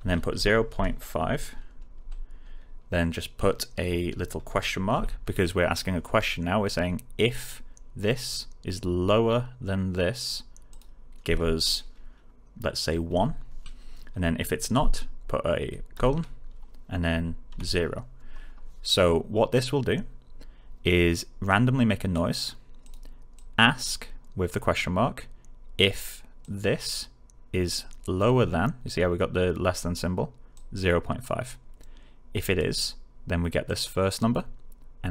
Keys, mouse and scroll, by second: 0.3-1.9 typing, 10.6 click, 11.2 space, 16.2 ;, 17.4 0, 21.4-22.3 click, 26.3-27.0 click, 30.5-31.4 click.